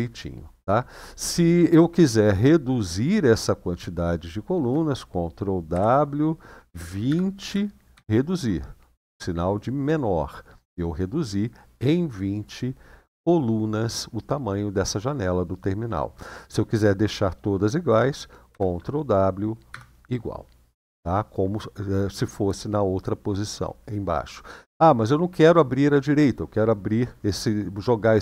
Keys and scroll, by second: 5.5 ctrl+w, 6.4 ctrl+w, 6.8-7.7 typing, 18.2 ctrl+w, 19.4 =.